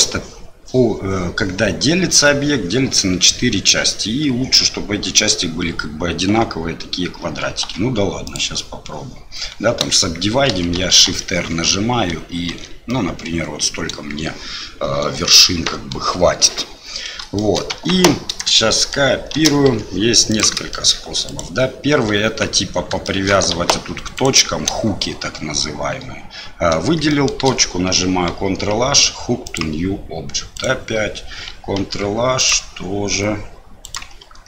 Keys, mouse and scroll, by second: 7.6 w, 10.5-12.5 typing, 17.4 shift+click, 17.7 Tab, 18.7 shift+click, 19.3 shift+d, 20.7 shift+click, 21.2 click, 22.2 Tab, 23.0 shift+click, 23.5 1, 24.1 click, 27.1 shift+middle click, 28.3 ctrl+h, 30.5 click, 31.8 ctrl+h, 33.8 click, 34.2 ctrl+h.